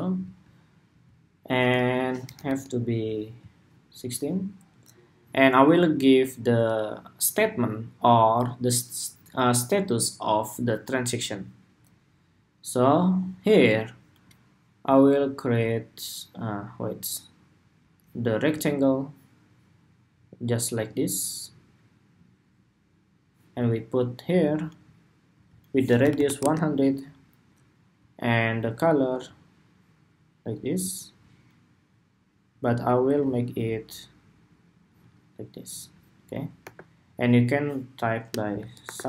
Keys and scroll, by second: 2.0 alt+Left.